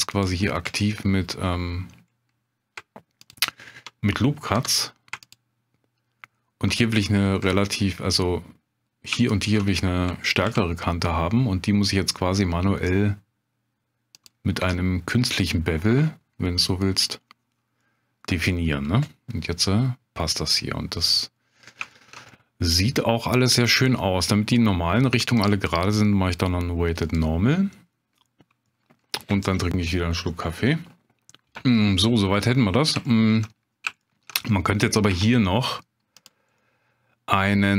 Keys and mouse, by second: 0.1 click, 4.5 2, 5.2 alt+click, 9.4 alt+shift+click, 10.5 ctrl+b, 14.1 click, 15.5 Tab, 17.8 middle click, 18.6-21.4 middle drag, 21.9 shift+click, 22.3 middle click, 25.4-27.3 drag, 28.7 middle drag, 32.5-32.8 middle drag, 33.0-33.4 shift+middle drag, 34.0 shift+middle drag, 35.1 Tab, 36.1 click, 36.6 middle click.